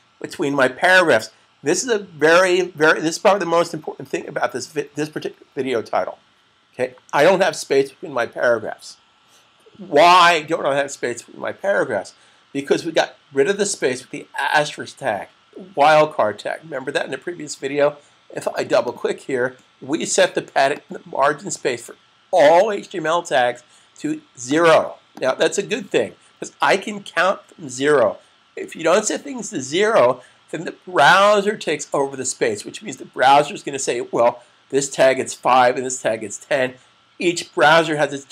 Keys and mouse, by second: 18.4 click, 18.6 double click, 20.5 click, 24.4 click.